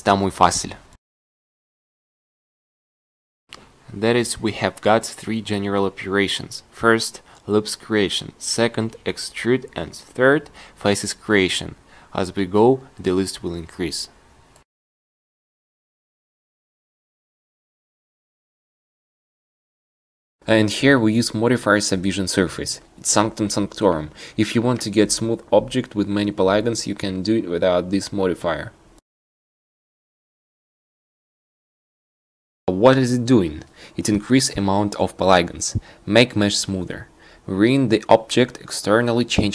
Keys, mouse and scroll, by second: 0.2 g, 1.8 g, 3.7 g, 5.9 a, 6.1 c, 6.8 g, 9.1 a, 9.3 c, 10.0 g, 12.4-18.6 drag.